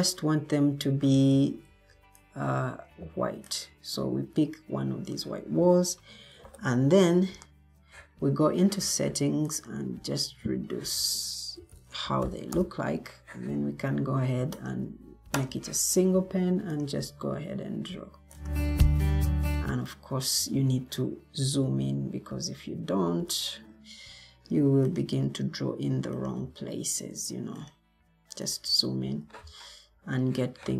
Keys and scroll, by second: 0.8 Escape, 1.6 Escape, 6.3 ctrl+t, 11.3-13.7 typing, 18.9-19.6 typing, 20.3 ctrl+z, 28.9 Escape.